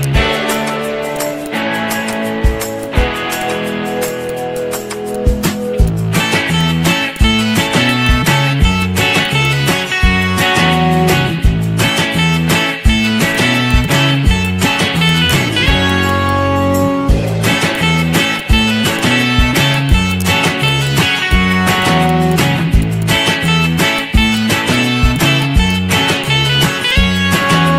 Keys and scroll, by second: 1.3 z, 6.2 Delete, 19.0 z.